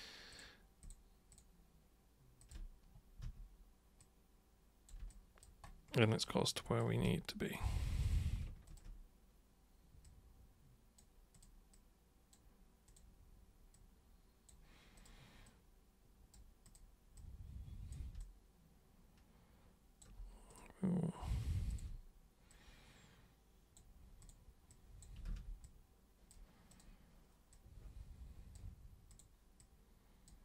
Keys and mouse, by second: 0.3 ctrl+shift+super+click, 0.8 ctrl+shift+super+click, 1.3 ctrl+shift+super+click, 2.4 ctrl+shift+super+click, 3.2 super+w, 4.0-4.9 super+drag, 5.1 alt+super+click, 6.2 alt+super+click, 7.0 super+right click, 8.0 super+click, 8.7 ctrl+shift+super+click, 10.1-10.9 super+drag, 11.4 click, 11.7-12.3 drag, 12.9 click, 13.7-14.5 drag, 15.0 click, 15.5-16.4 drag, 16.6 click, 17.2 click, 18.2-20.0 alt+drag, 20.5 click, 21.7 ctrl+shift+click, 22.5-23.8 drag, 24.2 super+click, 24.7 super+click, 25.3 ctrl+super+z, 25.6-26.3 super+drag, 26.7 super+click, 27.5-28.6 super+drag, 29.1 super+click, 29.6-30.3 drag.